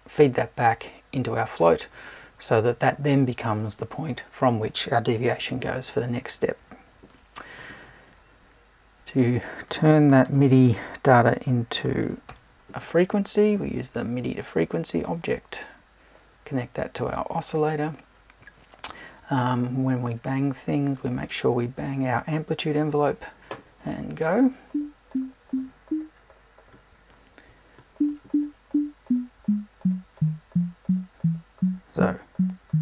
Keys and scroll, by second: 10.6 BackSpace.